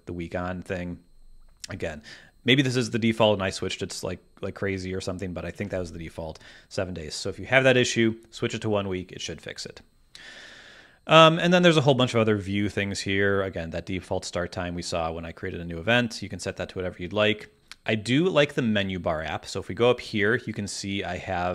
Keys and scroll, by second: 5.6 super+`.